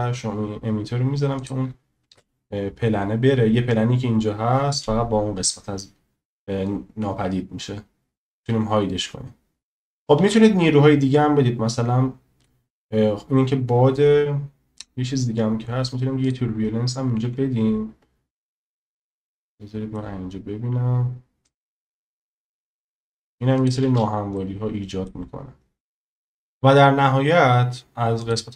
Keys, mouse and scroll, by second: 1.4 click, 2.1 space, 9.8 shift+a, 10.2 shift+a, 17.2 s, 18.8 click, 19.4-20.0 drag, 21.5 click, 23.9 space, 24.3-25.1 drag.